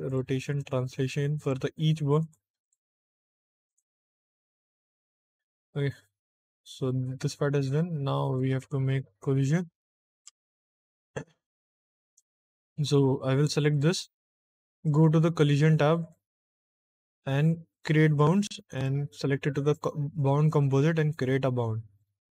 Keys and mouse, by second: 0.0 click, 0.4 click, 1.3 click, 2.1 click, 2.5 click, 3.6 click, 4.4 click, 4.9 click, 6.9 Tab, 8.6 ctrl+Tab, 12.0 click, 13.6 click, 14.7 click, 15.3 click, 15.9 click, 17.7 click, 18.6-19.6 drag, 21.0 click.